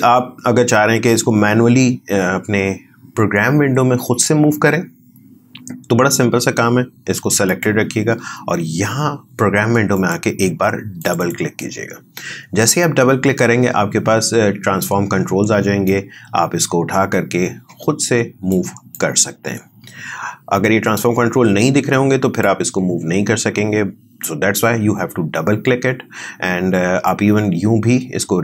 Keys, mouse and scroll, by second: 7.4 click.